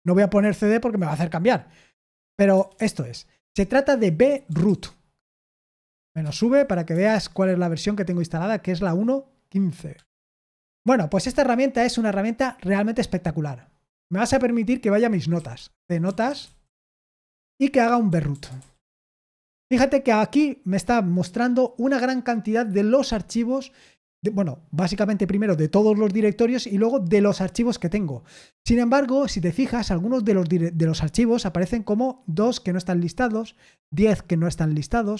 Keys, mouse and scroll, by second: 2.5-7.4 typing, 7.1 Return, 10.3 ctrl+l, 15.0-19.0 typing.